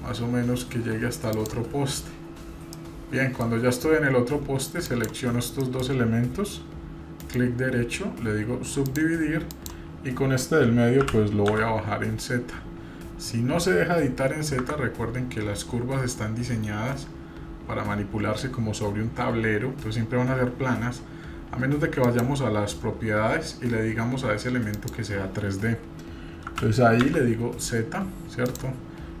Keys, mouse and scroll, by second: 0.5 click, 2.0-2.7 scroll down 1, 2.7 middle click, 3.6-4.5 scroll up 1, 4.9 shift+click, 5.6 middle click, 7.2 right click, 9.5 click, 11.0 g, 17.2-17.8 scroll down 2, 20.3 scroll up 1, 22.0 click, 24.8 click, 26.5 g, 29.1-29.2 scroll up 1.